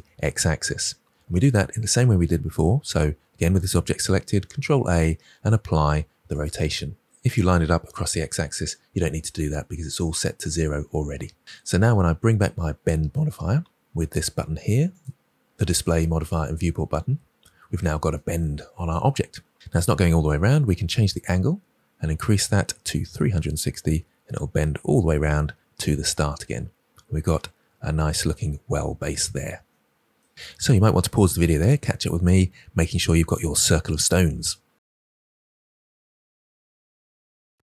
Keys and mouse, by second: 4.5 ctrl+a, 14.9 click, 21.0-25.2 drag.